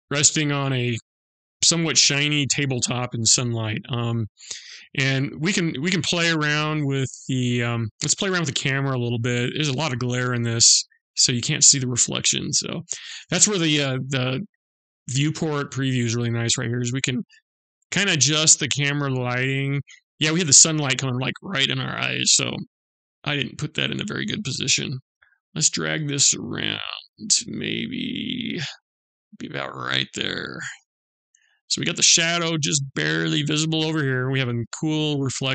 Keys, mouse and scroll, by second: 9.0 click, 15.1 middle click.